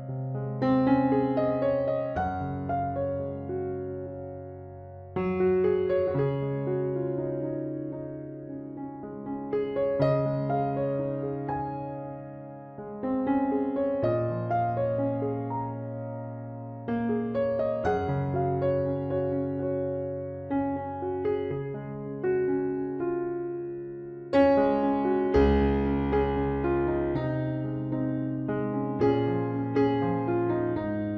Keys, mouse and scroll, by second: 21.6-23.5 right drag, 23.5-26.5 drag, 24.0 c, 26.7-28.4 right drag, 26.9 z, 27.8 z, 28.4-29.9 middle drag, 29.2 i, 30.9 KP_Decimal.